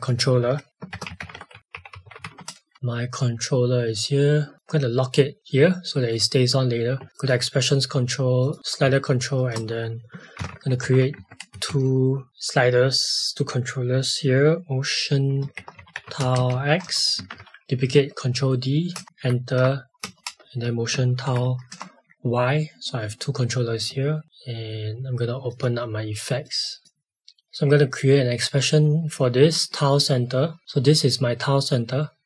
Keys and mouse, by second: 0.0 click, 0.7-2.7 typing, 4.5 click, 6.0 right click, 7.1 click, 8.6 click, 9.4 Return, 10.1-11.6 typing, 15.3-17.0 typing, 17.2 ctrl+d, 18.9 Return, 19.0 Right, 19.6 BackSpace, 21.2 shift+y, 21.7 Return, 21.7 KP_Enter, 24.2 click, 25.5 click.